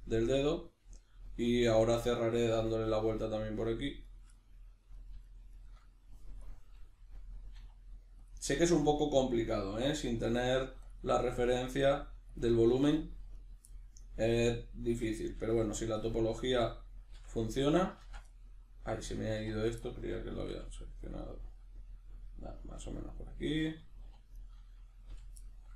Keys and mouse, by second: 4.0 right click, 4.4 middle click, 5.0 right click, 5.2 shift+right click, 5.5 shift+right click, 6.4 click, 6.8-8.3 middle drag, 7.6 e, 8.3 click, 8.4-10.9 middle drag, 10.4 g, 10.9 click, 10.9-12.4 middle drag, 11.8 g, 12.4 click, 12.5 middle click, 13.3 right click, 13.7 middle click, 14.4 right click, 15.2 g, 15.8 click, 16.0 middle click, 16.4 right click, 17.1 f, 17.4-19.6 middle drag, 18.0 ctrl+z, 19.4 1, 19.6 right click, 19.8-21.1 middle drag, 20.5 e, 21.1 click, 21.2-23.2 middle drag, 22.8 g, 23.2 click, 23.3-24.4 middle drag, 24.0 2, 24.4 right click, 25.1 f, 25.4 middle click.